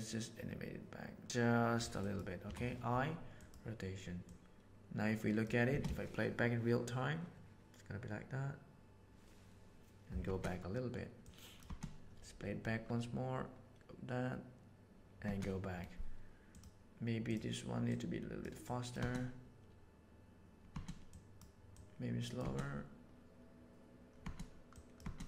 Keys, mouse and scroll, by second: 1.2 r, 2.4 i, 4.2-5.4 drag, 5.7 space, 10.2 space, 11.2-11.6 drag, 11.7 space, 15.2 space, 16.5 drag, 17.2 click, 17.9 click, 18.6 click, 19.0 space, 20.7 space, 21.1 click, 21.7-22.4 drag, 24.2 space, 24.7 drag.